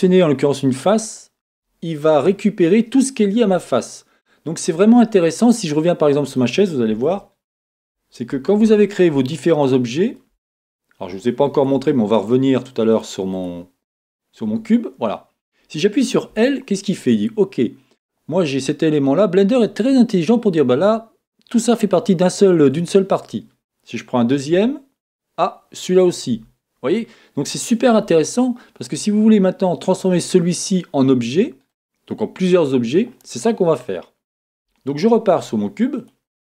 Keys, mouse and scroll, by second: 8.2-8.8 scroll up 2, 8.8-11.7 scroll down 3, 12.2 right click, 13.4 click, 14.5 Tab, 15.2-35.4 middle drag, 16.3 l, 24.5 l, 28.8-29.7 scroll down 2, 29.7 scroll down 1, 34.6 Tab, 35.4 right click.